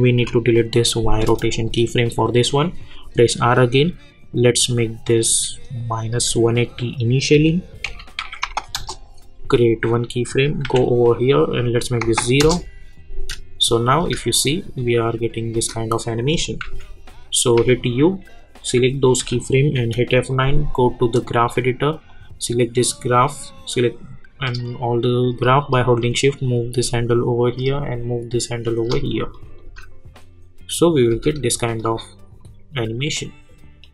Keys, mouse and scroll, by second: 2.9 r, 3.7 scroll down 1, 4.7-6.8 drag, 7.3 -, 8.7 Return, 9.8 click, 10.6 k, 11.6 click, 12.4 Return, 13.6 click, 14.0 space, 16.1 click, 16.6-17.6 typing, 18.6 click, 19.7 F9, 21.1-27.5 drag, 27.5-29.3 drag, 29.6 space, 31.7-33.8 drag.